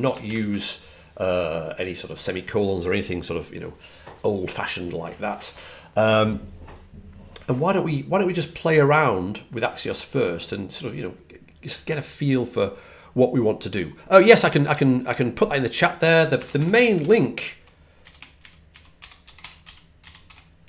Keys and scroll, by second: 0.1 alt+super+Left, 16.1-17.1 typing, 18.6-20.6 typing.